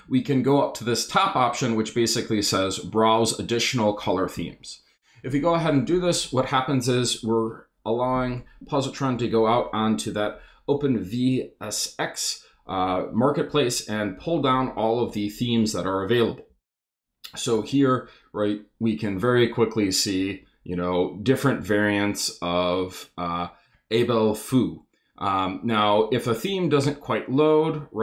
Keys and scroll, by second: 4.3 Return, 16.5 Down, 19.2 Down, 24.5 Down, 26.1 Up, 27.8 Down.